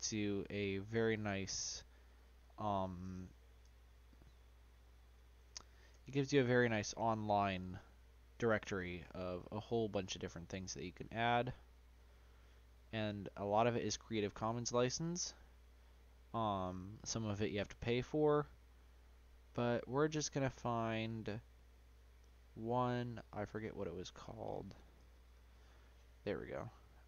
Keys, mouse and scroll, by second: 2.7-5.8 drag, 23.6-27.0 drag.